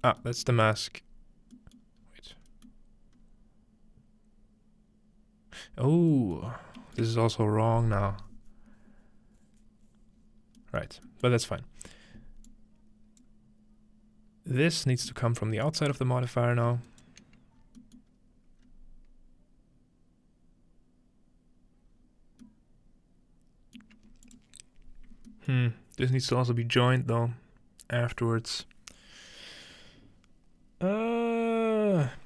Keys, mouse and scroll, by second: 0.6-1.0 scroll down 1, 1.0-5.9 scroll up 3, 5.9-8.3 scroll down 3, 8.3 scroll down 1, 10.1-11.5 scroll down 3, 11.5 scroll up 2, 12.5 click, 15.4 ctrl+right click, 16.0-16.4 ctrl+scroll down 2, 16.4 scroll up 2, 17.3-17.7 scroll down 2, 17.8-19.8 middle drag, 18.6 scroll down 1, 18.6 scroll up 2, 21.9 scroll down 1, 23.8 middle click, 24.2 click, 24.8-25.5 scroll down 2, 26.0 scroll up 3, 26.8-28.6 scroll up 2.